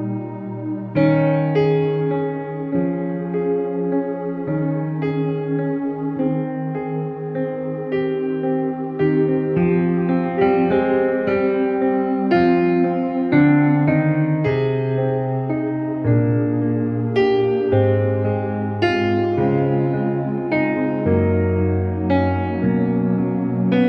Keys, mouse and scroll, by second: 0.5 shift+l, 1.9 ctrl+j, 3.0 click, 5.1 alt+click, 5.6-7.3 typing, 7.5-8.9 drag, 9.0 space, 9.5-10.7 drag, 10.7 space, 11.4 ctrl+shift+f, 12.1 click, 13.0 space, 13.3-13.6 click, 13.9-14.3 click, 13.9 space, 14.5 click, 14.5-14.9 space, 15.5 click, 18.4 ctrl+u, 19.0-19.4 click, 20.0 alt+t, 20.7-23.8 drag.